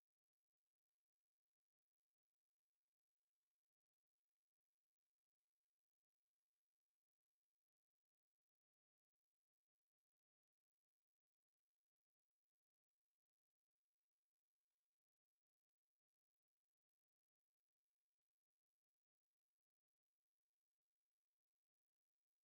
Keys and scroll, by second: 7.9 1, 13.5 2, 21.2 3.